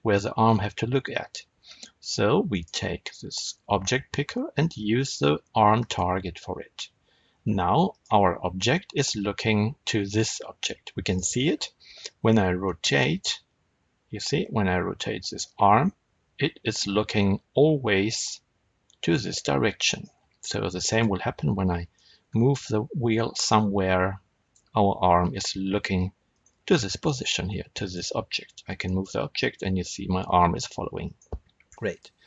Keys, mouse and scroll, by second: 7.8 click, 10.9 click, 12.5 r, 19.9 right click, 20.3-20.6 scroll down 1, 20.8 click, 21.9 g, 26.3 right click, 26.8-27.7 scroll up 1, 27.7 click, 28.7 g, 31.1 right click, 31.6 scroll up 1, 31.8 click.